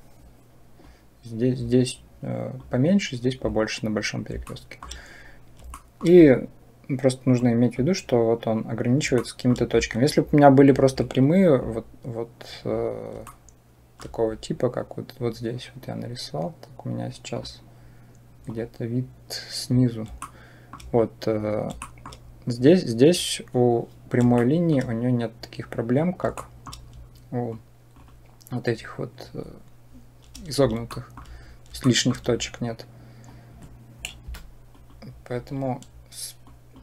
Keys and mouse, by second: 0.8-2.5 drag, 4.4 shift+middle click, 5.7 shift+middle click, 7.3 click, 9.0 shift+middle click, 13.1 shift+middle click, 20.2 shift+click, 21.7 shift+click, 24.3 shift+click, 26.2 shift+middle click, 27.5 click, 30.9 shift+middle click, 31.6 shift+click, 33.2 click, 34.1 Delete, 36.4 click.